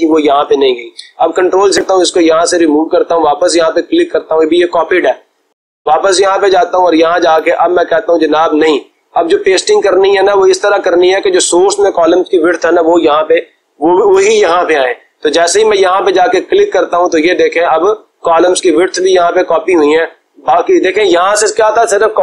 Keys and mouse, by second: 0.9 ctrl+z, 3.0-4.8 drag, 6.9-7.9 drag, 16.2-17.4 drag.